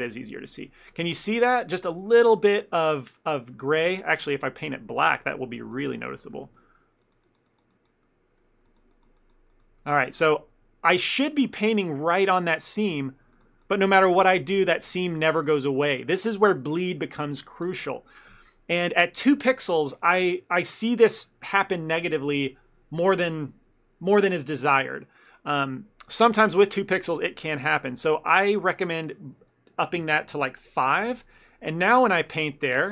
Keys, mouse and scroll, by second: 0.2 ctrl+middle click, 1.6 shift+middle click, 2.0 ctrl+middle click, 5.0 click, 6.3 ctrl+middle click, 6.5 middle click, 7.1 click, 8.1 middle click, 8.7 click, 9.9 middle click, 10.4 ctrl+middle click, 12.2 ctrl+middle click, 12.5 middle click, 13.4 click, 14.2 middle click, 14.9 click, 20.0 scroll down 1, 20.5 scroll up 1, 26.2 scroll down 1, 29.0 click, 31.6 ctrl+middle click, 32.3 click.